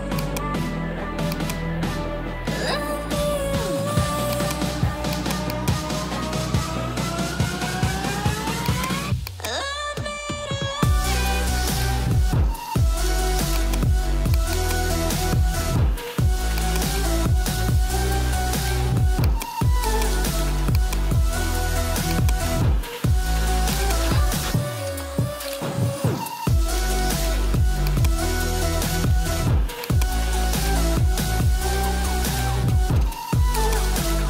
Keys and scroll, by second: 31.5 alt+BackSpace.